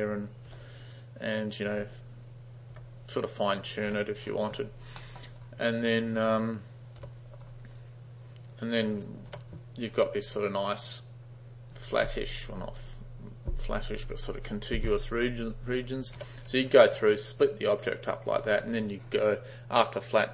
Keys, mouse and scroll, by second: 0.5 g, 1.7 g, 2.8 g, 3.9 g, 5.0 middle click, 5.8 click, 7.1 d, 7.8-9.1 drag, 9.4 u, 16.3 u, 17.6-18.2 drag, 18.5 u.